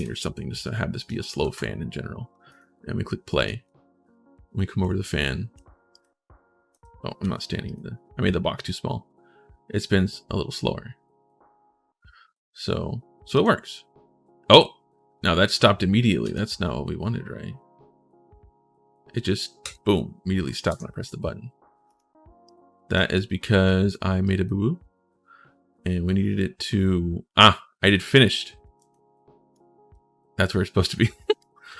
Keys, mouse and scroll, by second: 0.7 click, 1.2 ctrl+shift+s, 2.3 click, 3.1 right click, 3.4 w, 6.3-7.5 typing, 7.4 click, 13.1 click, 16.0 right click, 19.4 right click, 21.7 right click, 22.2 right click, 22.9 right click, 23.4 right click, 24.0 right click, 28.7 ctrl+right click, 28.9 ctrl+click, 31.1 click.